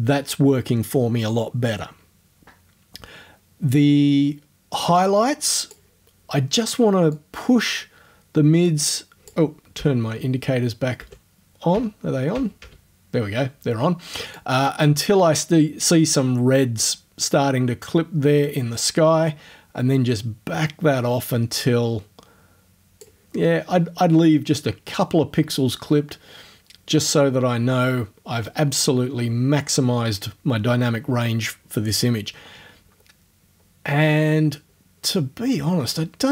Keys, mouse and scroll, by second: 5.0 click, 7.2-9.5 drag, 9.8 o, 11.0 o, 11.8 o, 14.4-23.2 drag, 23.2-23.8 scroll up 1, 23.8-24.2 scroll up 1, 26.0-26.4 scroll down 2, 26.8 scroll down 2, 27.4 scroll down 2, 28.4-28.9 scroll down 4, 28.9 scroll up 2, 33.0 scroll down 2, 33.6 scroll down 2, 35.1-35.5 scroll down 4, 35.8-36.3 scroll up 3.